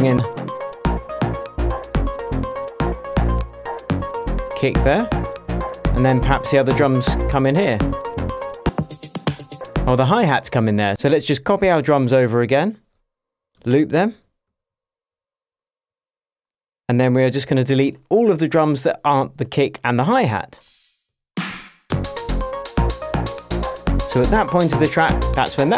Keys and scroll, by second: 10.2 space, 13.9 alt+super+d, 16.2 shift+super+d, 17.7 shift+super+j, 18.7 super+j, 21.4 BackSpace, 22.2 space, 23.6 shift+Tab.